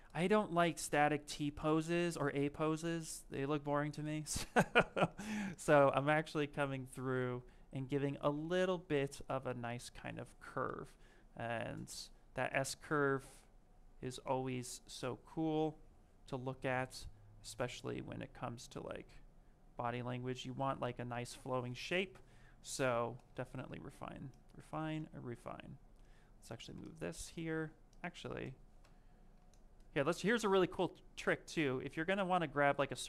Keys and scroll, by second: 16.5 ctrl+z, 21.2 ctrl+shift+space.